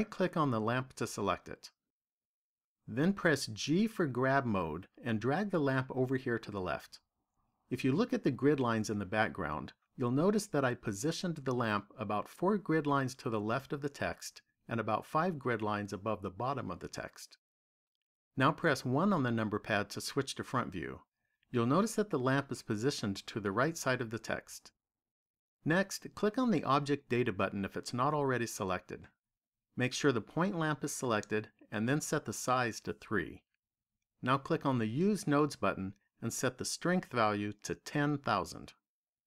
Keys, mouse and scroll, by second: 1.3 right click, 3.4 g, 6.3 click, 18.6 KP_1, 26.6 click, 32.6 click, 34.8 click, 37.1 click, 39.1 KP_0.